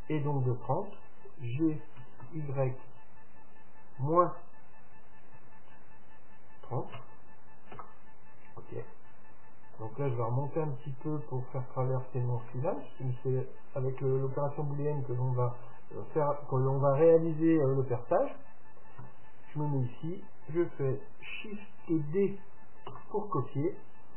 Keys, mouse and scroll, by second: 2.0 g, 8.9-10.7 middle drag, 10.7-12.5 drag, 12.5-14.3 middle drag, 17.5-20.1 middle drag, 19.1 KP_7, 21.9 shift+d.